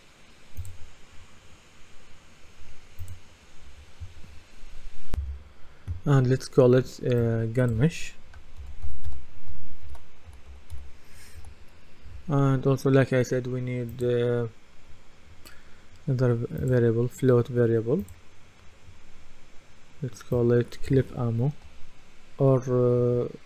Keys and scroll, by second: 5.2 F10, 8.3-11.2 typing, 11.4 Return.